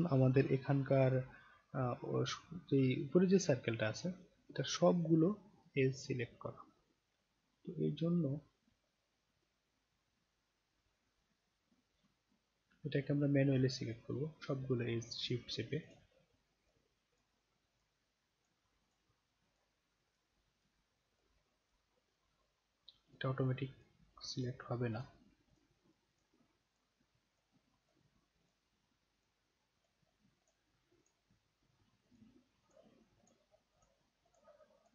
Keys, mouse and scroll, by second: 1.1 scroll down 1, 12.3 middle click, 12.8 alt+middle click, 13.8 alt+right click, 15.8 shift+click, 16.6 shift+click, 17.1 shift+click, 17.7 shift+click, 18.4 shift+click, 18.8 shift+click, 19.5 shift+click, 20.0 shift+click, 20.6 shift+click, 21.1 shift+click, 21.6 shift+click, 22.1 shift+click, 23.1 shift+click, 23.8 shift+click, 24.4 shift+click, 24.9 shift+click, 25.5 shift+click, 26.1 shift+click, 26.7 shift+click, 27.3 shift+click, 27.8 shift+click, 28.4 shift+click, 29.1 shift+click, 29.8 shift+click, 30.4 shift+click, 31.0 shift+click, 32.0 shift+click, 32.7 shift+click, 33.2 shift+click, 33.7 shift+click, 34.3 shift+click, 34.8 shift+click.